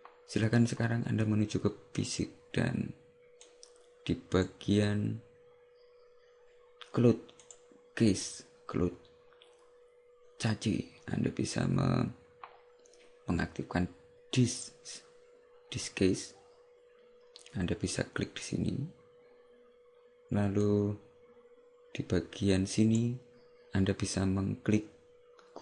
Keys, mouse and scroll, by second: 2.0 click, 3.5 click, 7.5 click, 20.7 click.